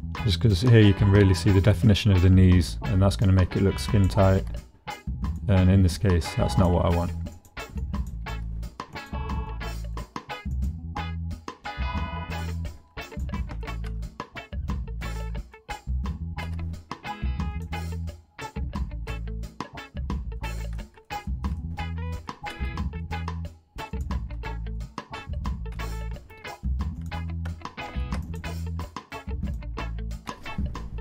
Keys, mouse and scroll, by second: 3.2 middle click, 4.3 g, 5.3 click, 6.0 click, 6.9 g, 7.4 click, 7.9 click, 8.2 g, 8.9 click, 9.5 click, 10.1 g, 10.5 click, 11.4 middle click, 11.7 click, 13.1 middle click, 13.6 shift+middle click, 15.3 middle click, 16.4 g, 17.5 click, 17.8-19.6 drag, 19.6 middle click, 20.8 click, 21.3 shift+click, 21.6 click, 22.3 shift+middle click, 23.9 middle click, 24.5 shift+middle click, 25.3 shift+middle click, 27.8 ctrl+r, 28.5 click, 29.2 click, 30.3 g.